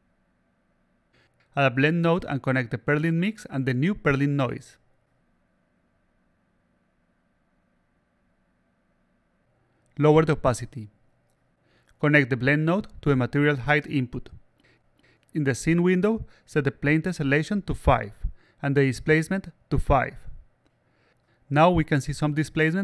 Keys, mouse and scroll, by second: 0.1 click, 1.0-2.4 drag, 3.5-4.5 drag, 5.2-6.4 drag, 6.9-7.9 drag, 9.2 click, 9.9 click, 12.8-13.8 drag, 16.1 click, 17.0 click, 20.3-22.3 alt+drag, 22.6-22.8 alt+drag.